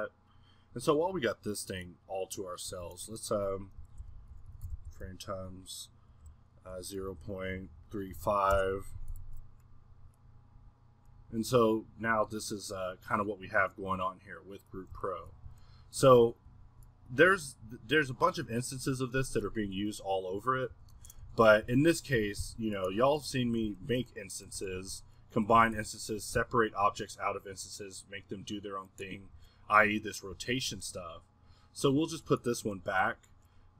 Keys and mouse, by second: 1.9-8.2 drag, 10.2-13.1 middle drag, 15.1-15.5 middle drag, 15.5 Escape, 16.5-19.5 middle drag, 20.7 r, 22.2 g, 23.2-24.5 middle drag, 24.7-25.5 middle drag, 25.5 g, 26.5-29.3 middle drag, 29.3 click, 29.3 a, 30.0 click, 30.3-31.6 middle drag, 32.3-33.7 middle drag.